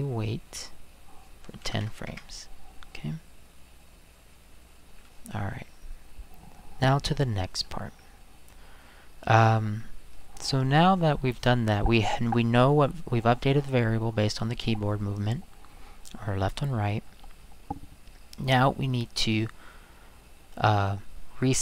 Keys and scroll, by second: 1.4-2.2 typing.